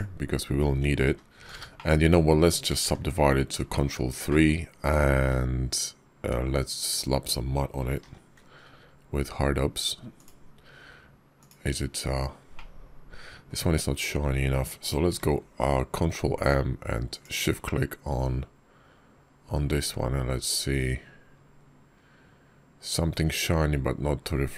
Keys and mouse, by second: 0.9 g, 1.6 shift+click, 2.7 ctrl+3, 3.5 shift+click, 4.1 click, 7.9 alt+m, 12.4 click, 12.6-13.3 middle drag, 15.0 alt+m.